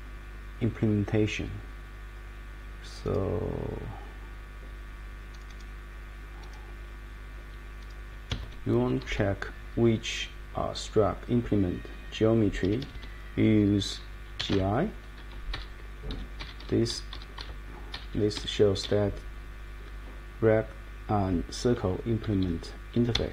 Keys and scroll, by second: 8.3 Escape, 12.6 Escape, 12.8 Escape, 12.9 Escape, 14.1-15.0 typing, 15.5 Page_Down, 16.1 Up, 16.4 Down, 16.9 Up, 17.3 Down, 17.9 Down, 18.3 Up, 18.8 Down, 19.8 Up, 21.6 Down, 22.2 Up, 23.1 Escape.